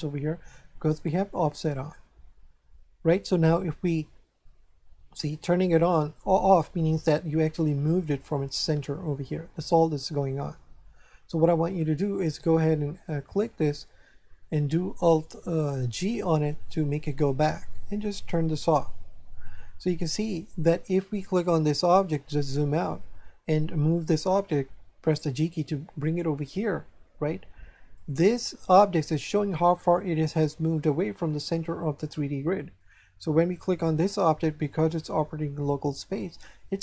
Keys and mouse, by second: 5.3 click, 12.9 click, 15.9 alt+g, 18.2 click, 21.3 right click, 22.5 shift+middle click, 25.2 g, 27.9 click, 32.1 shift+middle click, 33.5 right click.